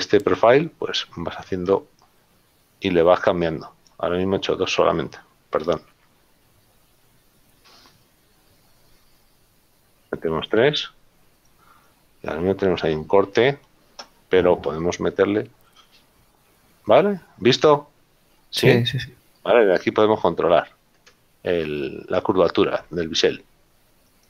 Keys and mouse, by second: 5.9 ctrl+z, 12.7 middle click, 16.7 click.